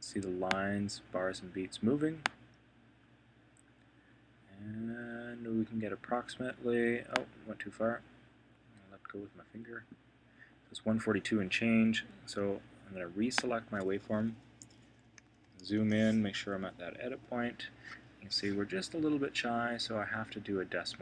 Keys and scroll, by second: 14.5 Right, 15.2 super+], 16.3 Right.